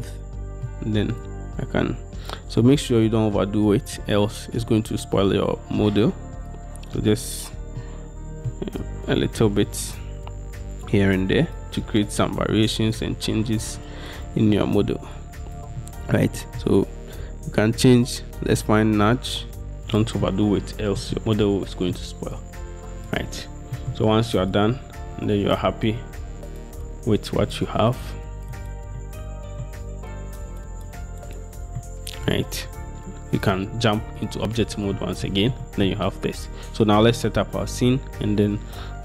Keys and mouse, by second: 1.3 click, 6.6 click, 6.7-7.9 middle drag, 13.1-15.3 drag, 15.3-21.3 middle drag, 22.5 click, 23.8 click, 24.8 click, 26.0-27.0 drag, 28.0 click, 28.2-30.2 drag, 30.2 middle click, 31.3 middle click, 33.7 middle click, 35.1-35.4 middle drag, 35.6-36.1 shift+middle drag.